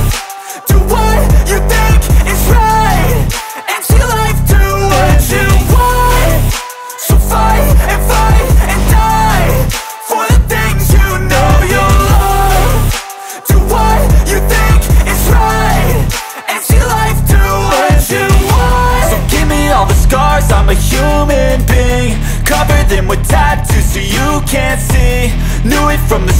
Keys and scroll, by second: 0.2 Escape, 3.7 Return, 4.1 space, 8.6 f, 10.0 Return, 10.8 p, 12.2 Return, 17.0 r, 23.1 space, 23.4 e, 25.2 space, 25.7 p.